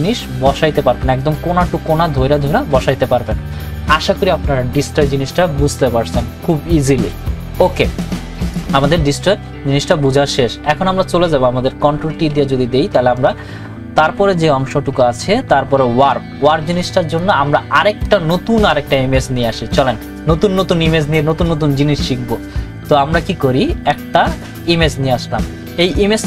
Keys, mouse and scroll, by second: 12.1 ctrl+t, 13.2 right click, 17.1 click, 24.1 click.